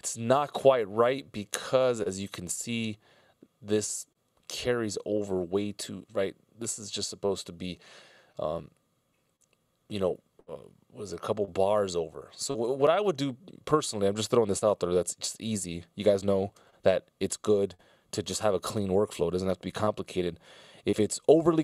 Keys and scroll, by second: 0.7 alt+], 1.9 super+z, 3.7 super+z, 15.1 F16, 15.3 Delete.